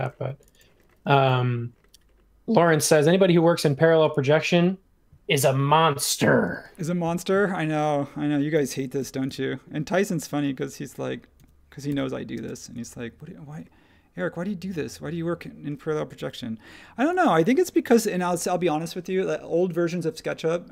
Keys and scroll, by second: 1.1 super+v, 6.5 space, 9.0 m, 11.3 1, 11.9 Return, 16.1 super+1, 17.8 m.